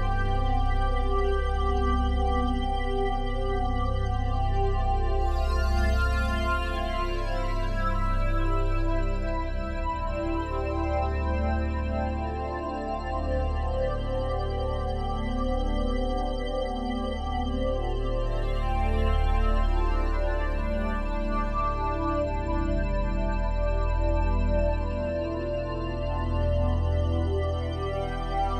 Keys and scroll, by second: 15.6 typing.